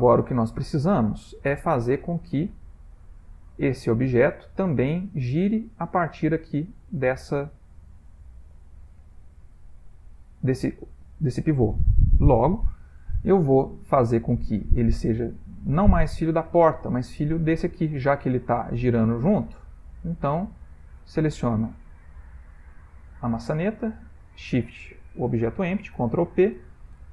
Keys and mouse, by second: 0.4 middle click, 1.4 shift+middle click, 2.9 click, 15.9 ctrl+middle click, 16.0 ctrl+middle click, 17.5 click, 18.8 click, 19.2 r, 20.9 click, 24.1 shift+click, 26.0 ctrl+p.